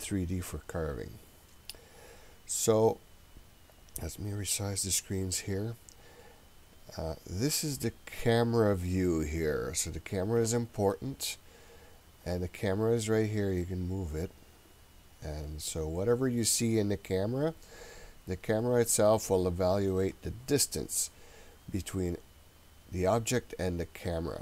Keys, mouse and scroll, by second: 4.3-5.6 drag, 6.5 scroll up 2, 6.9-7.3 scroll down 1, 12.3 click, 14.2-24.4 drag.